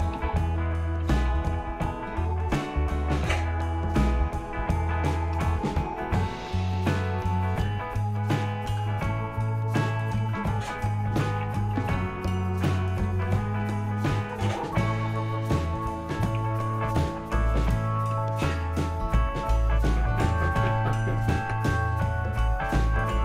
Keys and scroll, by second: 0.0-2.3 typing, 4.5 Return, 4.7 Page_Down, 5.1 Return, 6.7 Return, 8.9 Return, 10.7-14.1 typing, 16.4 Return, 18.0 space, 20.7 Page_Down, 21.5 Return.